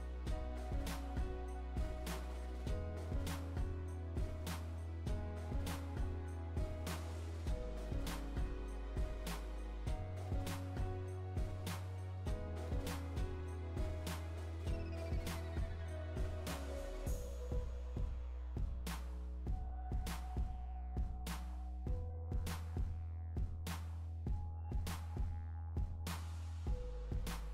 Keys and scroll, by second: 5.9 Right, 19.1 Right, 24.3 Right.